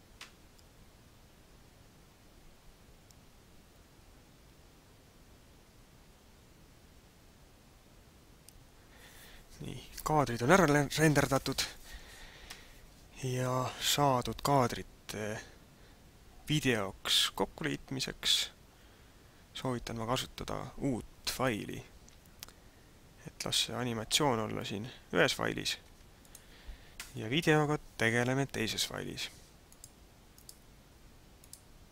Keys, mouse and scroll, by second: 12.4 Escape, 25.9 ctrl+s, 29.6 click.